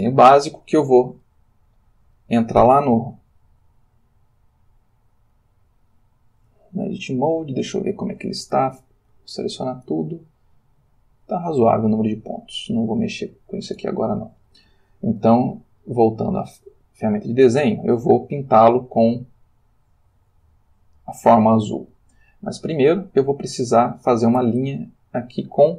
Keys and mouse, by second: 1.3-2.4 shift+middle drag, 6.4 Tab, 9.1 a, 10.0-13.0 ctrl+middle drag, 13.9 Tab, 15.8 click, 16.5 click, 18.0 click, 21.0 click, 21.9-22.9 ctrl+middle drag, 23.3-24.5 shift+middle drag, 24.8 ctrl+shift+middle click.